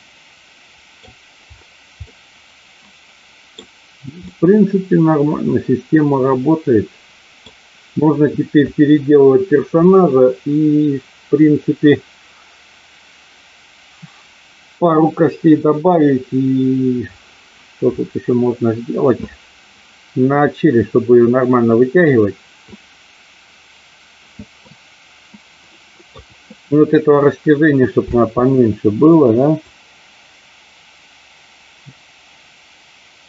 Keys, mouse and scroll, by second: 2.1-3.6 middle drag, 4.2-7.5 middle drag, 24.6-26.2 middle drag, 28.1 space, 29.7-33.2 drag.